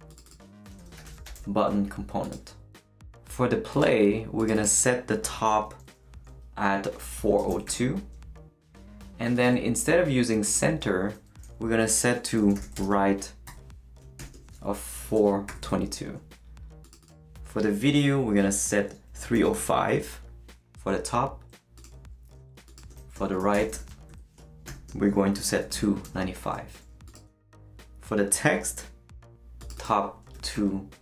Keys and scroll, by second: 0.5-1.8 typing, 7.1-8.1 typing, 12.1-15.5 typing, 19.0-20.0 typing, 23.1-26.5 typing, 30.1-31.0 typing.